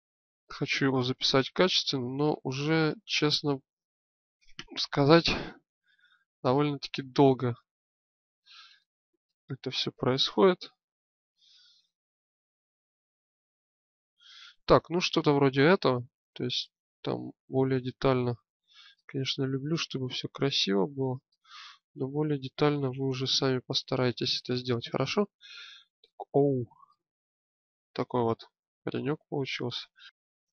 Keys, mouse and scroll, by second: 6.3-8.8 drag, 10.6 Tab, 15.1-16.3 middle drag, 17.2 middle click, 18.2 click, 19.0-20.0 middle drag, 20.0 click, 22.2 Tab, 23.0 middle click, 26.8-29.0 middle drag, 29.5 click.